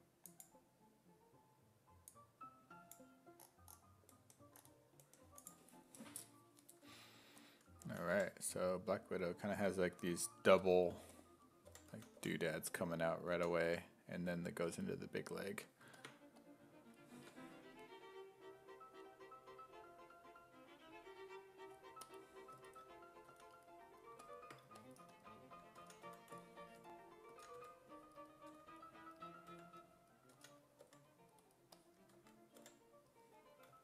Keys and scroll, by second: 7.9 s, 8.1 5, 9.6 2, 10.9-14.7 typing, 17.2 ctrl+z, 23.3 s, 25.8 s, 26.1 2, 27.3-30.8 typing, 32.2 2, 32.6 5.